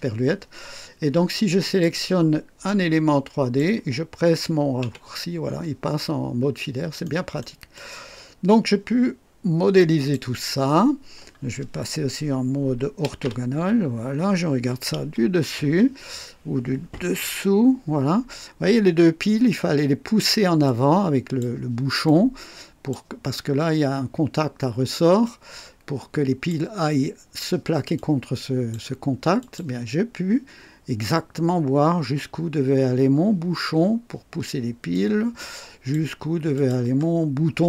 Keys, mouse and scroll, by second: 1.6 click, 2.6-3.7 drag, 4.8 &, 5.9-6.2 scroll up 1, 6.5 scroll down 1, 7.0 right click, 7.7-10.3 drag, 12.7-13.9 typing, 14.9-17.2 typing, 18.0 scroll up 1, 18.6-19.3 typing, 20.6 click, 22.0-23.1 drag, 25.2-26.6 drag, 27.9 click, 29.4 click, 34.9-36.1 drag, 36.5 click.